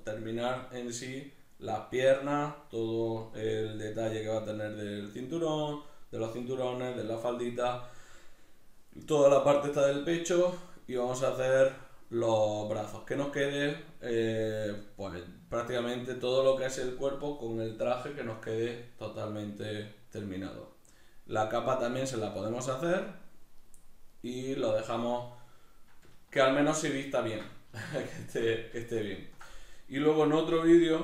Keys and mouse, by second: 14.4-18.4 middle drag, 21.1-31.0 middle drag.